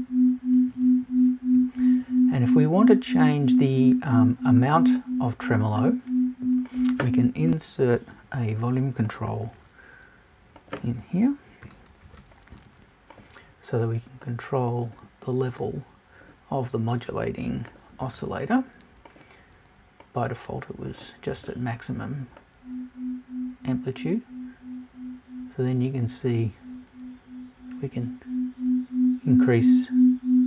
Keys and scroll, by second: 7.5 BackSpace.